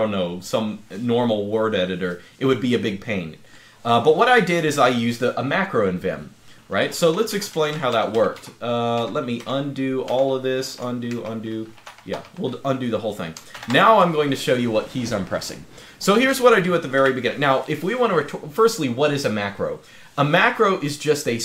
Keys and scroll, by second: 16.8 0.